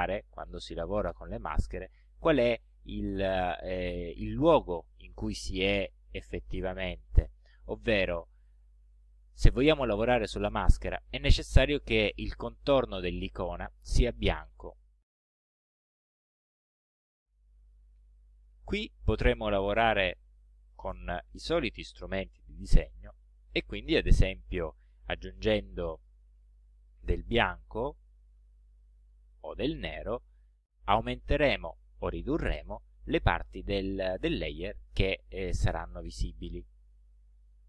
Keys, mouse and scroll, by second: 8.6 click, 9.5 click, 18.5 click, 20.2 click, 21.3 click, 23.0-26.4 drag, 28.1 click, 28.9-30.9 drag, 32.5-36.1 drag.